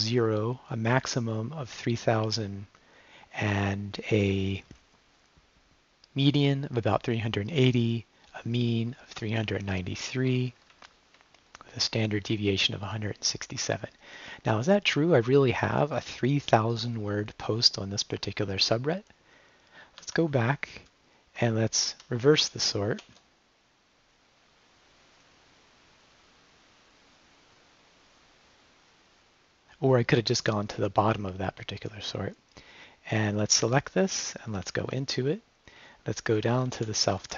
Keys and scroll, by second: 9.4 Right, 12.9 Left, 15.9 Down, 20.0 q, 21.6 Left, 21.9 Right, 23.0 ], 33.6 s, 34.0 Up, 34.6 g, 34.8 Return, 36.2-37.3 typing.